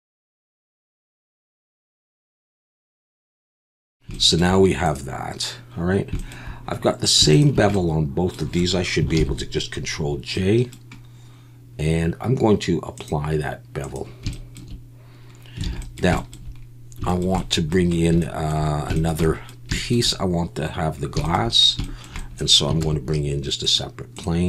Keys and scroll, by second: 0.7-2.9 typing, 0.9 Tab, 2.1 alt+a, 2.6 alt+a, 2.7 Tab, 3.3 alt+h, 3.5 alt+a, 9.2 ctrl+j, 15.7 alt+a, 22.8 shift+a.